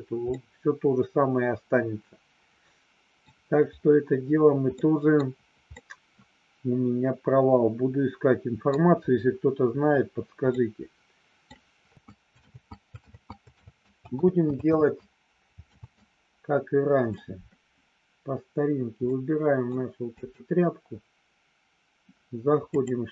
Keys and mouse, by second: 0.2-3.2 middle drag, 4.8 middle click, 5.8-8.8 middle drag, 10.5 middle click, 11.9 ctrl+z, 12.0 ctrl+z, 12.6 ctrl+z, 13.3 ctrl+z, 14.0 ctrl+z, 14.7 ctrl+z, 15.5 ctrl+z, 16.4 ctrl+z, 19.3 middle click, 20.4 click.